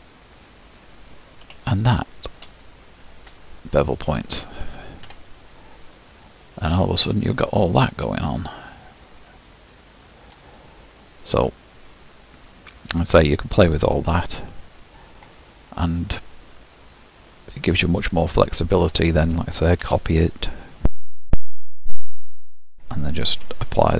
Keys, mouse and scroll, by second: 0.8 click, 3.4-5.1 drag, 5.1 Tab, 5.7-6.5 scroll down 12, 6.5-8.3 middle drag, 8.3-8.9 scroll up 4, 8.9-9.7 scroll up 1, 9.7 middle click, 10.4-11.3 scroll down 3, 11.3-13.3 middle drag, 13.3-15.3 scroll down 5, 15.3-15.9 scroll up 5, 16.9-17.5 scroll down 1, 17.5-19.9 middle drag, 19.9 shift+d, 22.7 click.